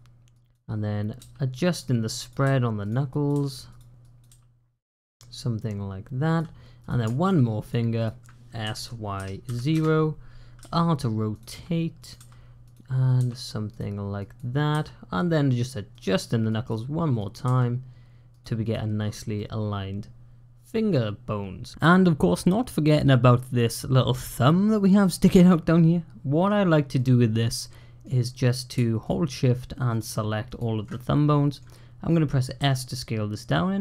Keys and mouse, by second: 0.3 click, 1.0 g, 2.1 click, 2.3 g, 3.1 click, 3.2 g, 4.0 click, 4.1 g, 6.6 click, 7.5 shift+click, 7.8 shift+click, 8.5 s, 10.5 r, 11.3 g, 12.0 r, 13.0 g, 14.2 click, 14.6 g, 16.3 click, 17.3 g, 19.2-21.7 drag, 21.7 middle click, 22.2-24.0 middle drag, 24.9-26.3 middle drag, 26.8-27.9 middle drag, 29.8 shift+click, 30.3 shift+click, 30.8 middle click, 32.0 middle click, 32.5 s.